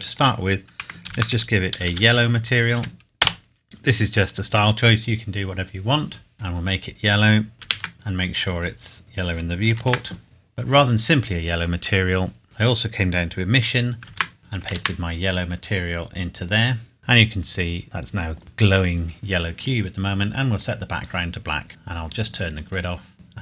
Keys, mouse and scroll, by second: 1.2-2.8 typing, 3.2 Return, 6.3 click, 7.6 ctrl+c, 7.9 scroll down 1, 9.7 ctrl+v, 10.2-11.1 scroll down 1, 12.4-13.4 scroll up 1, 14.0 ctrl+v, 14.2 ctrl+c, 14.8 ctrl+v, 15.7 click.